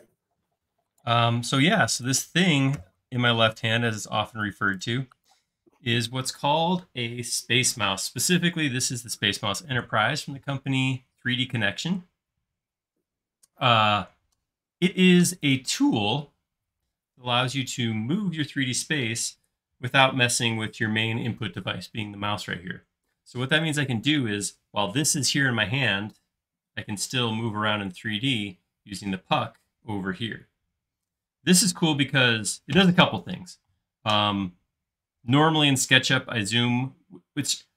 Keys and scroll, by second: 2.8 BackSpace.